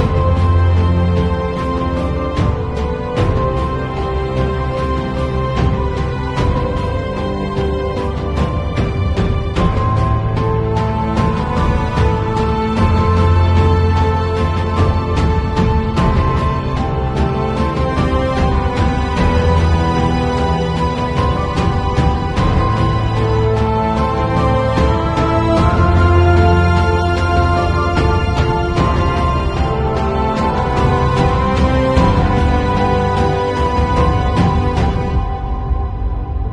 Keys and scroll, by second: 4.1 super+u, 9.7 b, 12.0 ], 15.2 [, 16.8 2, 17.3 ], 20.2 0, 23.2 v, 23.8 super+Tab, 26.4 shift+super+g, 32.1 super+i, 33.3 b, 34.3 ].